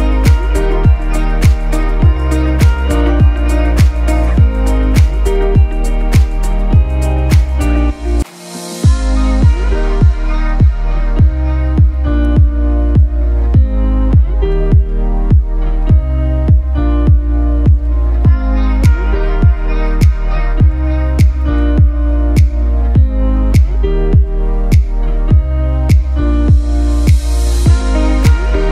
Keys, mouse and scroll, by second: 0.5 space, 1.2 click, 4.8 scroll up 1, 6.2 click, 7.6 scroll down 1, 7.9-8.9 typing, 8.3 click, 8.8 click, 9.2-19.5 drag, 19.6 alt+space, 19.7 click, 23.2 click, 26.9 click.